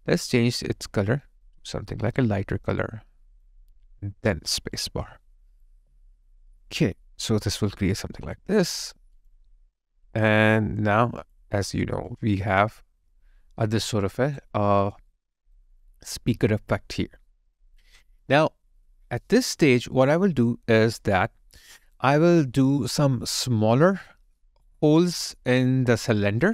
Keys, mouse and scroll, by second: 5.6 space, 5.7 alt+click, 11.3 double click, 11.8 alt+right click, 12.1 alt+click, 14.1 alt+right click, 14.7 alt+middle click, 15.2 alt+right click, 15.9 alt+click.